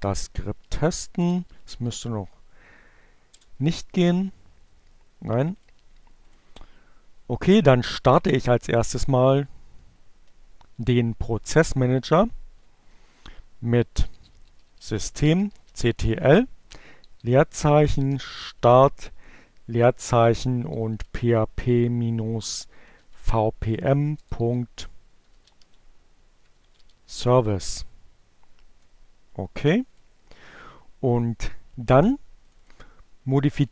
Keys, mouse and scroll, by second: 0.0-1.6 typing, 1.7 Return, 4.9 click, 6.0 click, 11.1-17.3 typing, 18.8-19.6 typing, 21.4 -, 21.6 BackSpace, 21.8 s, 23.9-26.5 typing, 26.7 Return, 29.1 click, 31.7 click.